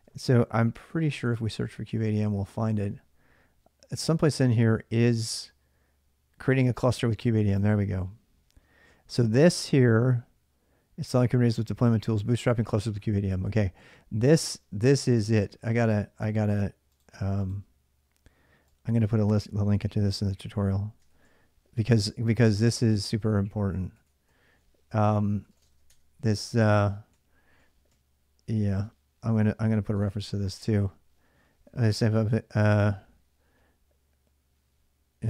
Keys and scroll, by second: 0.2-2.4 typing, 19.5 alt+Tab, 20.9 ctrl+a, 21.5 ctrl+a, 22.9 ctrl+a, 23.1 ctrl+a, 23.7 ctrl+a, 24.1-30.3 typing, 26.1 Return, 31.4-32.7 typing, 34.7-35.2 typing.